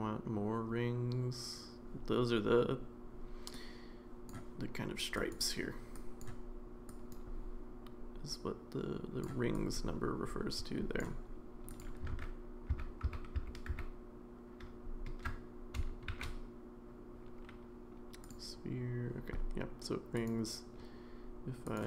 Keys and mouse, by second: 3.7 click, 5.2 click, 5.9 click, 6.9 click, 8.3 click, 9.5-11.0 drag, 11.8 click, 12.1 ctrl+z, 12.7 ctrl+z, 13.2 ctrl+z, 13.4 ctrl+z, 13.7 ctrl+z, 16.1 shift+a, 20.2 click, 21.7 click.